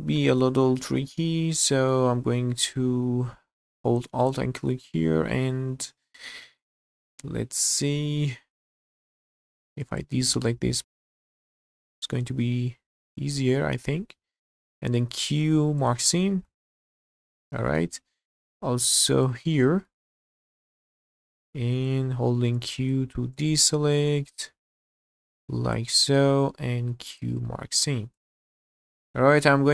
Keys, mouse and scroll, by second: 0.7-1.9 middle drag, 2.0 scroll up 1, 4.2 alt+click, 5.7 scroll down 1, 6.4 shift+middle click, 6.7-8.9 middle drag, 9.8 ctrl+click, 10.4 ctrl+click, 10.9 ctrl+click, 11.1 ctrl+click, 11.3 ctrl+click, 11.7 ctrl+click, 14.4 middle click, 15.0 q, 16.7 shift+middle click, 17.7 middle click, 19.1 alt+click, 19.8-21.0 middle drag, 21.5 ctrl+click, 22.6 ctrl+click, 23.3-24.8 ctrl+drag, 25.4 ctrl+click, 26.8 q, 28.1 click, 28.5-28.8 scroll down 1, 28.8-29.7 middle drag.